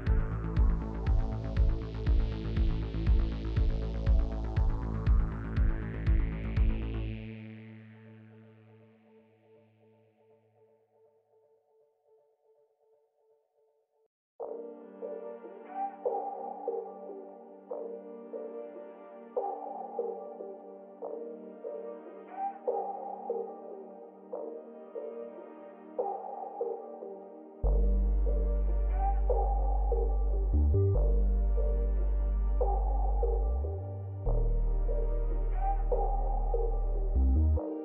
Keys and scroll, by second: 23.8 f.